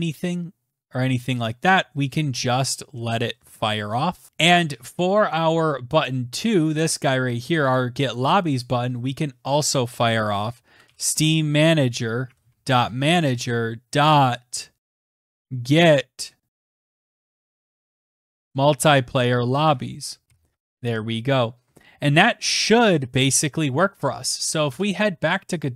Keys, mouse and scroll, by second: 3.0-3.8 scroll down 4, 3.8 scroll up 1, 3.9-4.3 scroll, 5.7 click, 7.1 click, 7.4 click, 7.9 click, 8.2 click, 8.4 Tab, 10.0-17.7 typing, 18.0 Down, 18.4 Return, 19.1-19.9 typing, 20.1 ctrl+s, 24.3 alt+Tab, 25.7 alt+Tab.